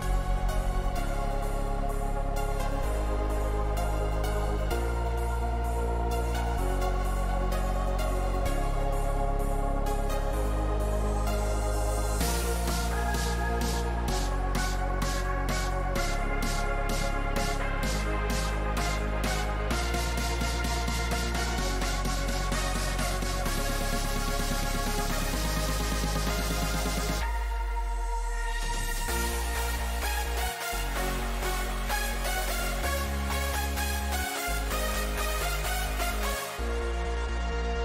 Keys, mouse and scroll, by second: 34.1-37.8 middle drag.